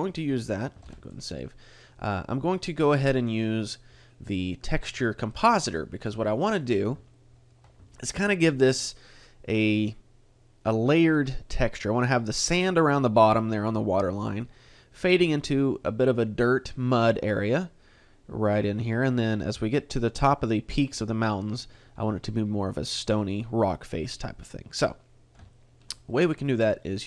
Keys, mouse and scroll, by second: 0.8 ctrl+s, 2.4 middle click, 6.2 middle click, 6.7-7.2 scroll up 3, 7.1 shift+middle click, 8.2 shift+middle click, 23.0 middle click, 24.2-25.0 scroll down 2, 25.5 shift+middle click, 26.1 middle click.